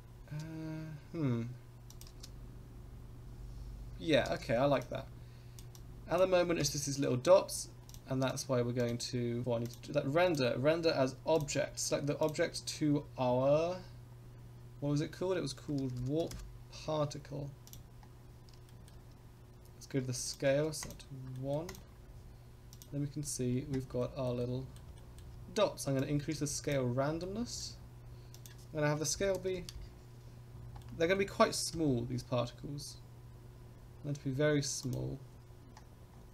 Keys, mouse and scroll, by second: 1.9 click, 2.1 space, 3.3 click, 4.3 space, 4.8-5.6 drag, 5.8 click, 6.6 KP_0, 7.1 scroll up 2, 7.5 scroll down 2, 7.9 click, 8.3 click, 8.8 click, 9.4 scroll down 4, 9.6 click, 10.2-11.4 drag, 12.2-17.7 drag, 18.7 shift+middle click, 20.2 click, 21.3 middle drag, 21.6 click, 22.0-23.4 scroll up 2, 23.4 click, 24.0 shift+middle click, 24.4-24.8 middle drag, 24.9 shift+middle drag, 25.9 click, 27.2 shift+middle click, 28.3-30.2 drag, 30.5 scroll down 2, 30.8-31.1 middle drag, 31.7 KP_0, 34.9 click, 36.1-36.3 scroll up 5.